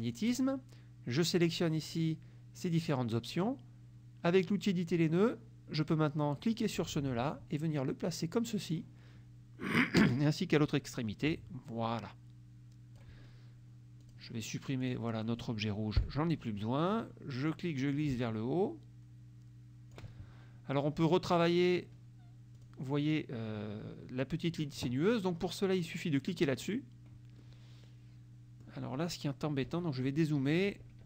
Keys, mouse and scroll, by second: 0.1 click, 1.4 click, 1.9 click, 4.8 click, 6.6-9.0 drag, 11.0-13.3 drag, 14.1 click, 14.9 click, 16.1 Delete, 17.6-20.2 drag, 22.6 click, 26.5 click, 27.5-28.9 middle drag, 29.7 KP_Subtract.